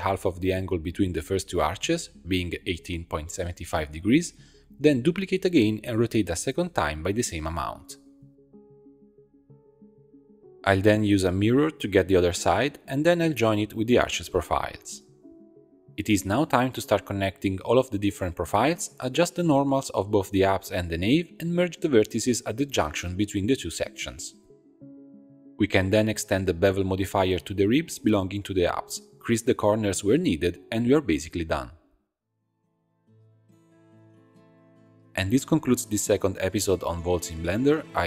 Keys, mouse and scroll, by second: 6.0 shift+d, 7.6 r, 10.6 Tab, 10.6-12.2 drag, 12.2 middle click, 13.9 shift+click, 15.1 ctrl+j, 15.9 shift+click, 16.1-19.2 typing, 16.2 click, 17.0 click, 17.2 shift+click, 17.9 middle click, 18.5 shift+click, 19.2-20.2 drag, 20.4 Tab, 20.7 a, 21.7 shift+n, 22.1 c, 23.7 m, 25.5 middle click, 25.6 shift+click, 26.1 shift+click, 26.8 click, 27.1 middle click, 27.4 alt+shift+click, 27.9 alt+shift+click, 28.6 click, 29.3 shift+click, 29.7 shift+e, 30.7 scroll up 1, 30.7 middle click, 31.5 click, 31.7 shift+click, 32.3 shift+click, 32.5 shift+click, 32.9 shift+e, 33.4 click, 34.2-34.6 scroll down 4, 34.6-37.6 middle drag.